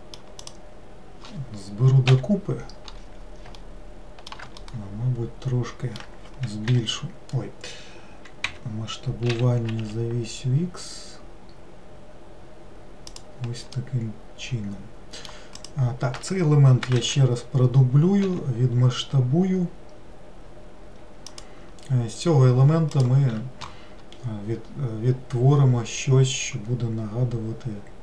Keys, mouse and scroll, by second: 0.5 click, 2.1 l, 3.6 alt+middle click, 4.6-6.7 middle drag, 6.7 l, 8.5 Escape, 9.4 s, 13.8-15.6 middle drag, 15.6 click, 17.0 shift+d.